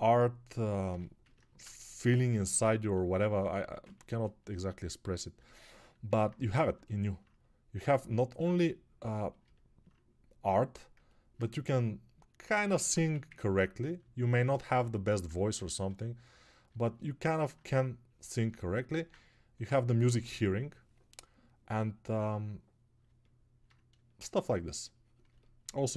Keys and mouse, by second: 13.3 ctrl+1.